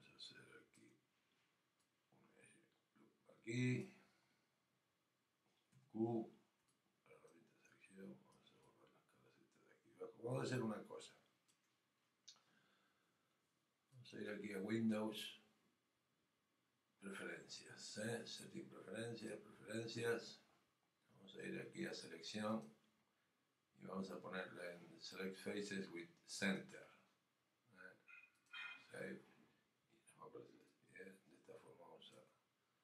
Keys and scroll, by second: 6.6 alt+q.